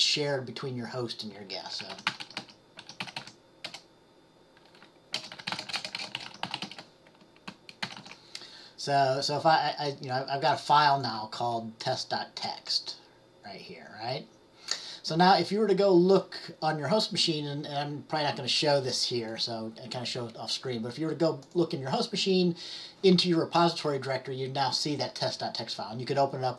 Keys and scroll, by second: 1.7-3.8 typing, 5.2-7.2 typing, 7.9 ctrl+shift+x, 8.1 ctrl+s.